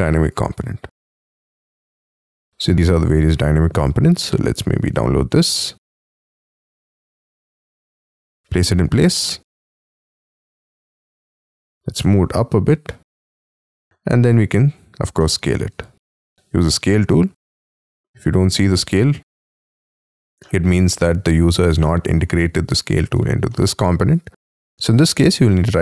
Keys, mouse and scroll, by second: 2.7-3.5 scroll down 4, 3.5-4.3 scroll up 4, 5.1 scroll down 1, 13.0 shift+click, 13.5 middle click, 13.8 s, 15.2 middle click, 15.4 space, 16.0 s, 16.8 y, 17.6 middle click, 18.7 middle click, 19.7 middle click, 20.8 space, 21.0-21.8 scroll up 9, 21.8 middle click, 22.9 scroll down 4, 23.1 space, 23.5 middle click, 24.1 y, 25.1 right click.